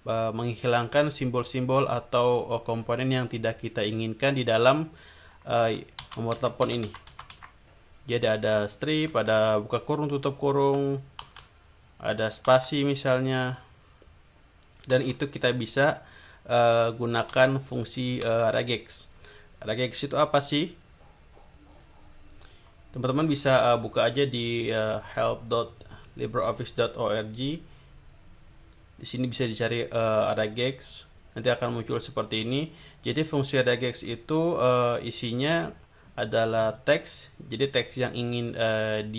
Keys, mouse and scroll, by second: 6.0 Up, 9.1 Down, 10.6 Down, 12.4 Down, 14.9 Down, 17.3 Down, 18.2 Right, 21.7 click, 30.9 click, 31.8 click, 34.0 scroll down 1, 36.7 click.